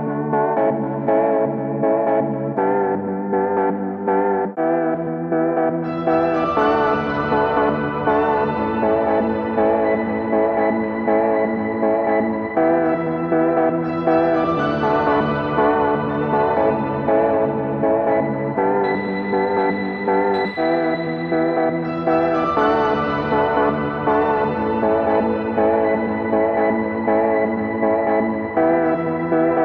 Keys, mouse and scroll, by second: 0.6-6.6 drag, 6.9 2, 8.3 click, 9.3-9.9 typing, 10.1 Return, 12.5 click, 13.7 ctrl+a, 15.1-16.8 typing, 18.5-29.3 drag, 29.4-29.6 typing.